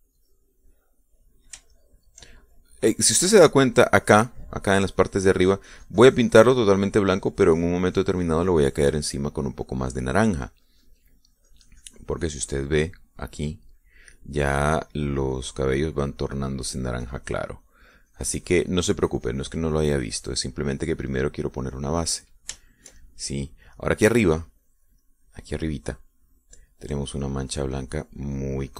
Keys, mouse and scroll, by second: 1.9 middle click, 3.0 shift+click, 4.8 middle click, 6.0 middle click, 6.8-14.3 drag, 15.8-23.8 drag, 23.9 shift+middle click, 24.7 click, 26.4 middle click, 28.2-28.7 drag.